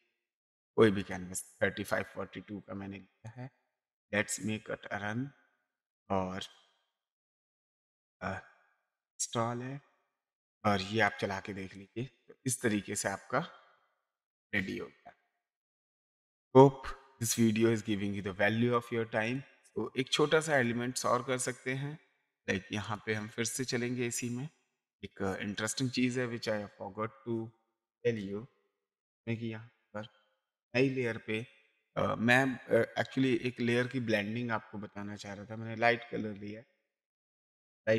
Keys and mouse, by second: 1.0 click, 3.2 click, 4.3 click, 5.6 click, 11.1 click, 11.9 space, 12.4 click, 13.7 click, 14.5 click, 15.3 click, 19.2 click, 20.5 click, 22.8 click, 25.6 click, 30.6 click, 33.3 click, 35.7 click.